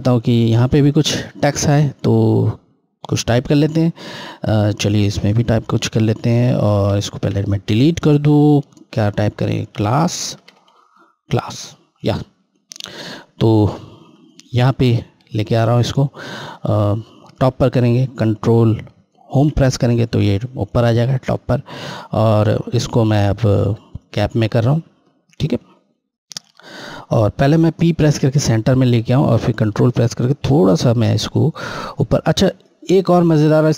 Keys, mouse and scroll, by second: 5.3 F8, 6.7 a, 7.1 Delete, 9.7-10.3 typing, 12.4 typing, 12.7 click, 12.7 click, 19.3 ctrl+Home, 22.8 click, 28.1 p, 29.7 ctrl+click.